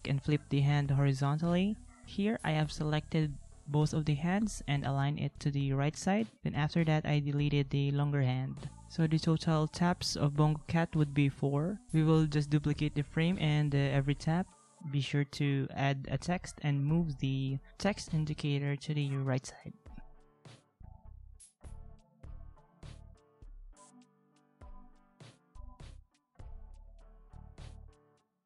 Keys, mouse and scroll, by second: 0.4 ctrl+z, 3.4 ctrl+z, 4.9 ctrl+x, 9.4 ctrl+c, 10.6 ctrl+v, 11.5 ctrl+z, 11.6 ctrl+z, 11.8 ctrl+z, 12.1 ctrl+z, 12.8 ctrl+v, 18.4 ctrl+c, 19.7 ctrl+v, 20.1 ctrl+x, 20.5 ctrl+v, 24.2 ctrl+-, 27.8 ctrl+x.